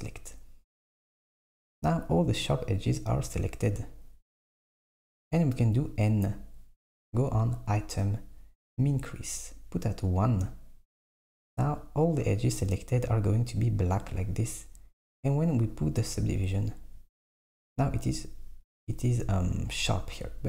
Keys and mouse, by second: 4.0 middle click, 5.6 n, 7.2 click, 9.0-11.1 drag, 16.6 click, 19.3 Tab.